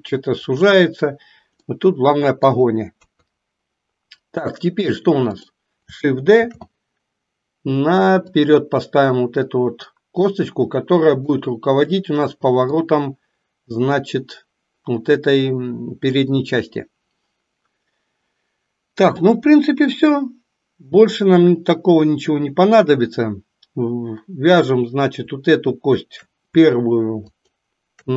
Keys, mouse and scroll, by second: 1.7-2.7 middle drag, 2.9 KP_3, 5.3 click, 6.5 shift+d, 10.2-11.3 drag, 12.8-14.1 drag, 27.3 shift+click.